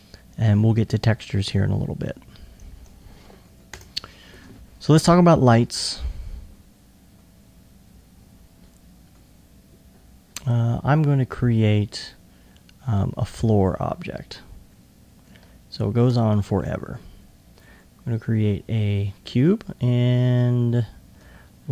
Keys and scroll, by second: 16.5 alt+1, 17.8 1.